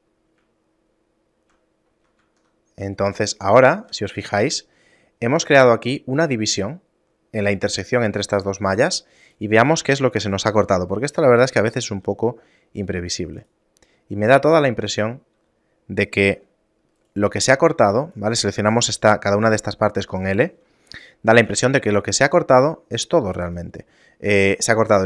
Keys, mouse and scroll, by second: 0.8 shift+middle click, 2.4 ctrl+Tab, 4.0 z, 4.6 shift+middle click, 8.5 shift+middle click, 9.4 right click, 10.0 a, 10.6 l, 12.1 g, 15.5 g, 17.6 k, 18.3 right click, 20.3 l, 21.6 g.